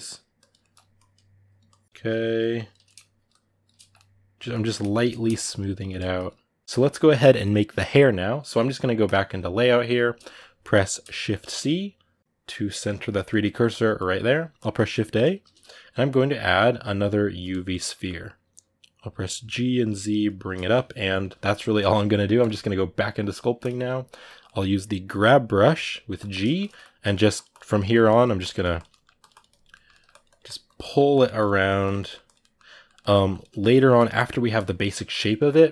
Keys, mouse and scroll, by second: 0.4 ctrl+middle click, 0.7-1.7 shift+drag, 1.7 middle click, 1.8 shift+click, 2.6 middle click, 2.9 shift+click, 3.5-5.2 ctrl+middle drag, 5.2 shift+click, 5.7 middle click, 5.9 shift+click, 6.4-8.8 shift+middle drag, 8.8-24.2 drag, 23.4 middle click, 24.2-25.4 middle drag, 25.4 g, 25.6 f, 26.2 ctrl+shift+middle click, 26.8-27.8 drag, 27.8 middle click, 28.2 click, 28.6 middle click, 28.9 click, 29.5 ctrl+middle click, 29.9 click, 30.6 middle click, 30.9 click, 31.0 ctrl+middle click, 31.4 click, 31.7 middle click, 32.0 click, 32.2 middle click, 33.1 click, 33.2-34.3 ctrl+middle drag, 34.3 click, 34.6 middle click, 34.8 click, 35.6-35.7 middle drag.